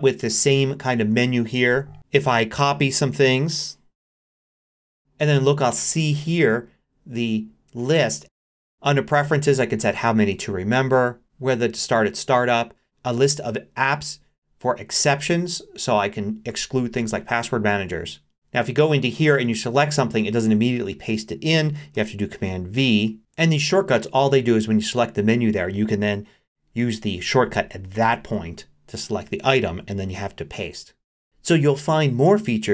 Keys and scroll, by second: 1.7 super+h, 21.9 super+v, 28.0 super+4, 30.1 super+v.